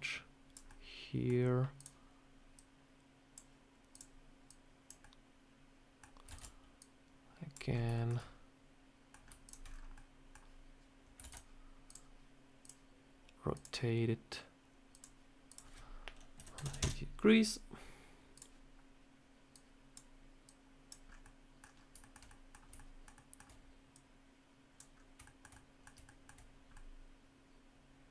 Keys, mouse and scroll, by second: 0.6 middle click, 1.6 click, 2.4 click, 3.8 click, 4.3 click, 4.9 middle click, 6.2 shift+d, 6.7 click, 7.6-8.0 scroll up 3, 7.8 shift+middle click, 8.0 shift+scroll down 1, 8.0 scroll up 1, 8.1 middle click, 9.0-9.8 scroll down 5, 9.3 shift+click, 9.8 middle click, 11.1 shift+d, 11.8 click, 13.4 click, 14.8 click, 15.4 click, 18.2 click, 19.4 click, 20.3 click, 21.0 scroll up 3, 21.1 middle click, 21.5 scroll down 2, 21.9 shift+middle click, 22.2 middle click, 22.6 shift+middle click, 23.1 shift+middle click, 23.8 click, 24.8 scroll up 1, 25.1 shift+middle click, 25.4 middle click, 25.9 shift+middle click, 26.4 scroll down 1, 26.6 middle click.